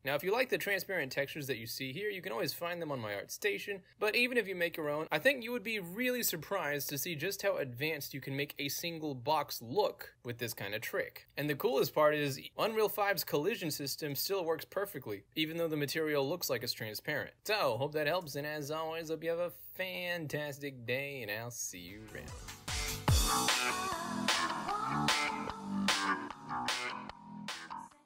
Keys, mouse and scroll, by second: 0.1 alt+z, 1.1 click, 1.5 click, 1.9 click, 2.2 click, 2.6 click, 3.2 click, 4.0 click, 4.5 click, 5.1 click, 5.2 right click, 6.7 w, 7.1 w, 8.0 w, 10.5 w, 10.9 w, 11.8 space, 15.7 right click, 16.5 d, 16.6 space, 17.8 space, 18.3 a.